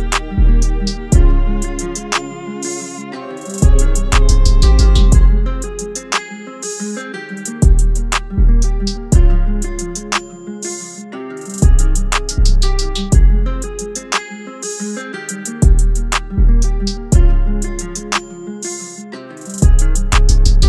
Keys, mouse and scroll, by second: 0.5 click, 5.3 Up, 8.1 click, 17.3 click.